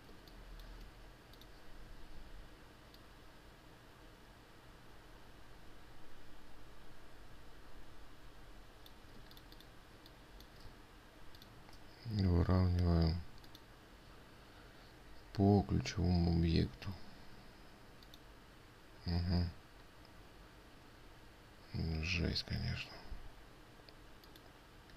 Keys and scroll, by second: 9.8 ctrl+space, 19.8 ctrl+z.